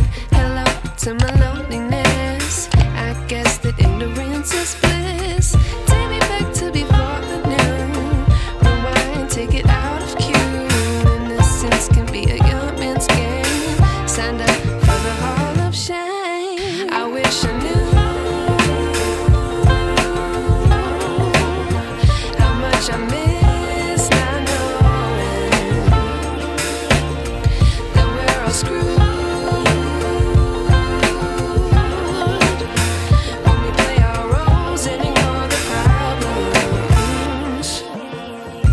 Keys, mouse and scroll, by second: 6.4 x, 7.4-11.1 typing, 13.1-15.6 drag, 20.3-20.9 drag, 24.3 space, 24.7-25.6 ctrl+drag, 26.5-27.8 drag, 27.8 space, 28.4-29.9 alt+click, 34.3-34.9 drag, 38.3 ctrl+t.